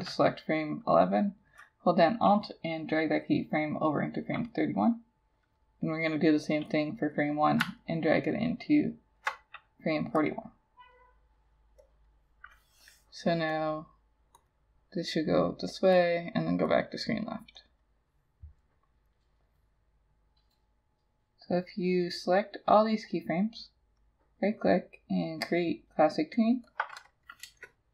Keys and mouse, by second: 7.1 double click, 7.9 alt+click, 24.0 right click, 27.5 Return.